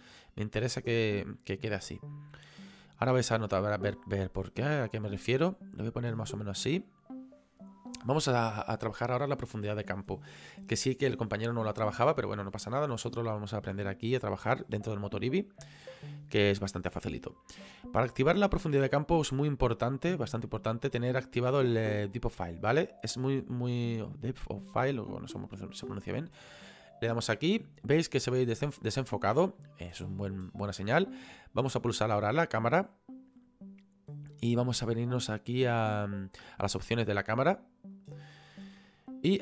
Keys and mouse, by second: 26.4 click, 32.4 click, 37.9 click.